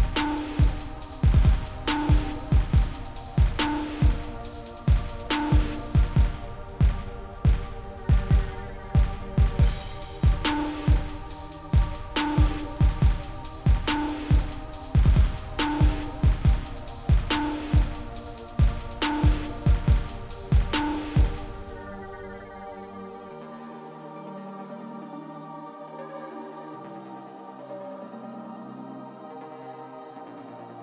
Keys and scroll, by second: 22.1 0, 24.4 1.